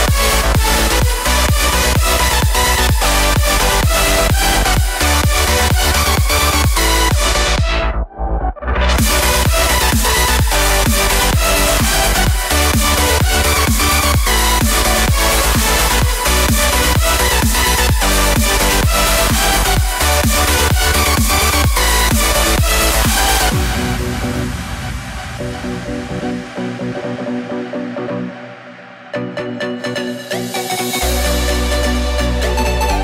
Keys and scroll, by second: 32.9 super+z.